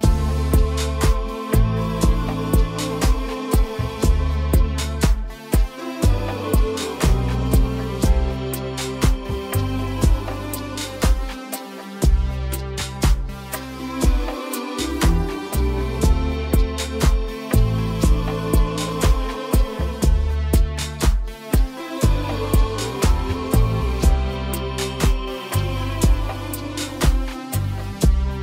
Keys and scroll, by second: 3.6 ctrl+t, 9.4 ctrl+t, 23.3 ctrl+t.